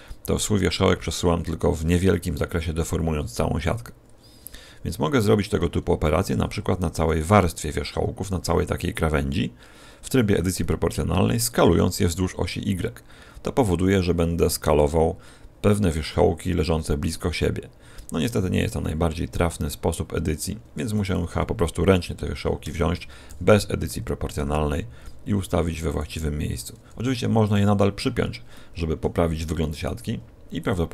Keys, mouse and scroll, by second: 7.0 alt+shift+right click, 11.6 s, 18.7-19.5 scroll up 7, 20.9 right click, 22.0 g, 23.2 o, 24.4 g, 25.9 click, 26.5 right click, 26.8 g, 27.4 click, 28.5 middle click, 29.7 right click, 30.0 g, 30.6 click.